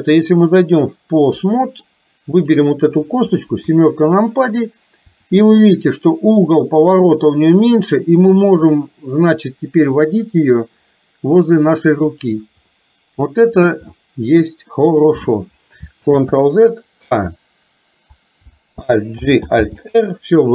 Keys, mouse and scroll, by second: 1.5 middle click, 3.6 KP_7, 5.1 r, 12.8 middle click, 14.0 middle click, 16.0 ctrl+z, 17.1 a, 19.3 alt+g, 19.6 alt+r.